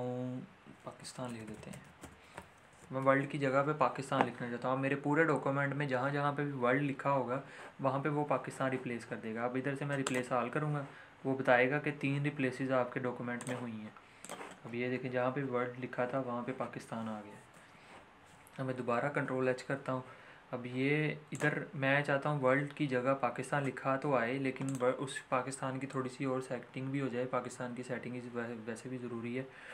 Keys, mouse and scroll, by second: 0.6-2.5 typing, 10.0 click, 13.4 click, 14.7-16.5 scroll up 1, 16.5 scroll up 1, 17.5 ctrl+z, 18.9 ctrl+h, 21.2 click, 23.1 click, 24.6 click.